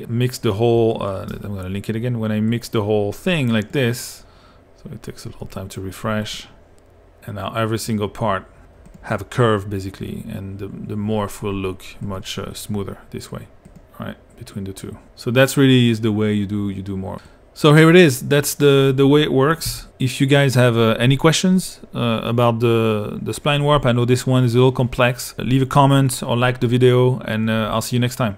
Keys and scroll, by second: 19.7 p.